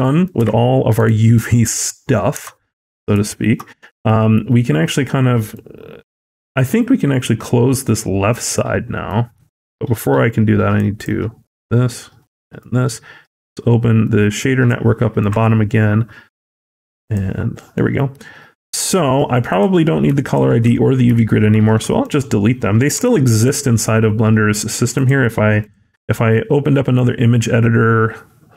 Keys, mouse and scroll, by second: 5.9 Tab, 5.9 middle click, 5.9 click, 5.9-6.2 scroll, 17.4 scroll down 3, 17.6 middle click, 17.9 scroll up 1, 18.4 middle click, 18.4 scroll up 6, 20.1 shift+click, 20.9 x, 21.3-22.0 scroll down 3, 21.6 middle click, 22.0-22.8 scroll up 1.